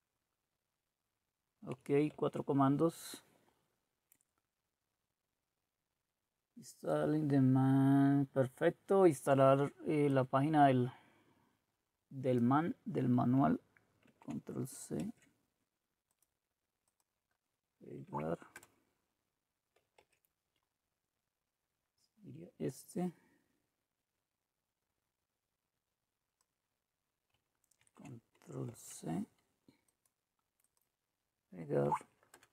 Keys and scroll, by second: 2.2 alt+Tab, 14.0 ctrl+c, 18.1 Right, 18.5 Return, 20.0 alt+Tab, 27.8 ctrl+c, 28.7 alt+Tab, 31.9 Right, 32.3 Return.